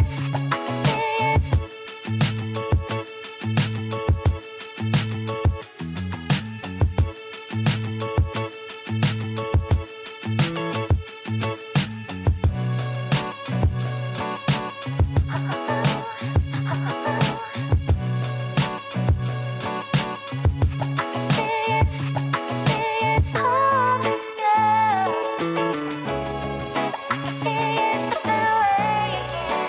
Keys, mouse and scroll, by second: 0.9 click, 3.2 a, 4.4 e, 10.6 scroll down 3, 10.9 Tab, 11.6-14.6 middle drag, 14.6 KP_3, 15.7-16.1 scroll up 5, 17.4 g, 20.2-22.8 middle drag, 22.8 g, 25.6 KP_1, 26.5 Tab, 27.1-28.0 scroll down 2, 28.0-29.2 shift+middle drag, 29.2 shift+z.